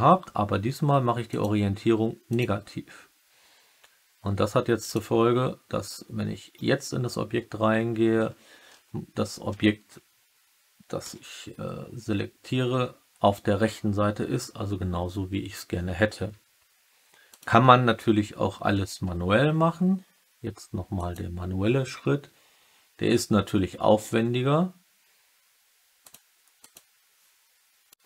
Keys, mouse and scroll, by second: 1.3-2.3 drag, 4.8-6.5 drag, 6.5 Tab, 8.1 3, 8.6 3, 9.4 3, 10.9 a, 17.2 click, 21.0-28.0 drag.